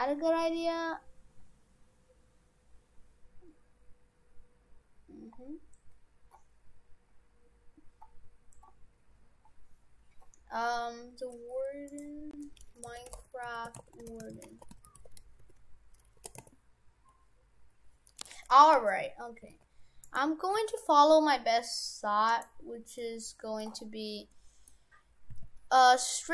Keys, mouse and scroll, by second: 18.6 middle click, 19.4 g, 20.5 g, 23.0 middle click, 23.8-24.3 scroll up 4, 24.3 middle click, 24.9-25.3 scroll down 3, 25.3 s.